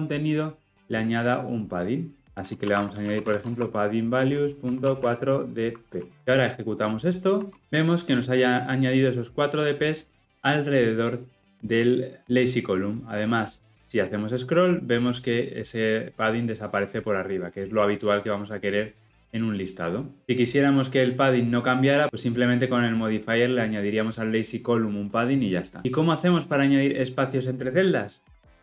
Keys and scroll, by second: 4.2 Return, 7.0 shift+F10.